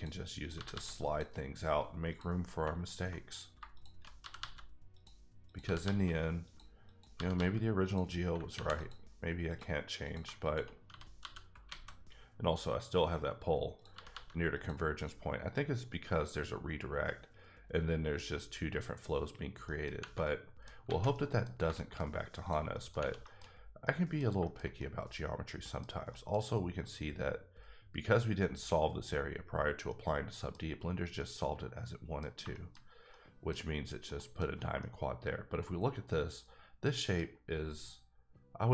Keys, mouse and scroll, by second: 0.4 click, 0.5 g, 0.7 g, 1.0 click, 2.1 click, 2.8 click, 4.2 g, 4.4 g, 4.9 click, 5.4 click, 5.6 g, 5.8 g, 6.4 click, 6.8 click, 7.1 g, 7.3 g, 7.8 click, 8.5 ctrl+r, 8.9 click, 10.0 click, 10.4 shift+click, 10.9 f, 11.2 f, 11.7 alt+a, 13.7 click, 13.9 g, 14.5 click, 19.3 click, 19.4-20.0 scroll down 3, 19.6 middle click, 20.2 middle click, 20.7 scroll down 1, 20.8 alt+a, 21.1 middle click, 21.4-22.0 scroll down 4, 21.7 shift+middle click, 22.7 middle click, 22.9 Tab, 23.2 shift+middle click, 23.4-23.8 shift+scroll up 2, 24.2-24.7 shift+middle drag, 25.8 scroll down 1, 26.1 middle click, 26.4-29.1 scroll up 3, 29.4-29.9 scroll down 1, 29.9 middle click, 30.7 scroll down 3, 31.2 middle click, 33.4 middle click, 34.2 middle click, 34.8 middle click.